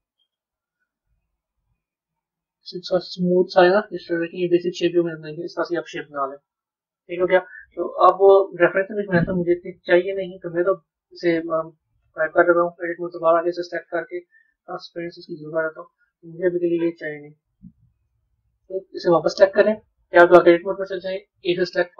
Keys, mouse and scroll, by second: 0.6 KP_3, 12.3 Tab, 12.7 click, 14.5-15.8 drag, 15.8-17.6 middle drag, 17.6 click, 18.3 middle click, 19.1 drag, 20.2 b, 20.6 middle click.